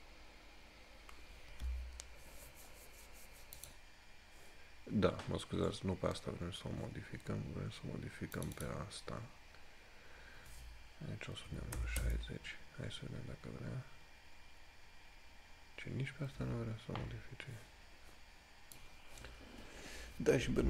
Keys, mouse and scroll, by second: 3.8 click, 5.6 scroll up 1, 8.5 click, 19.0 click.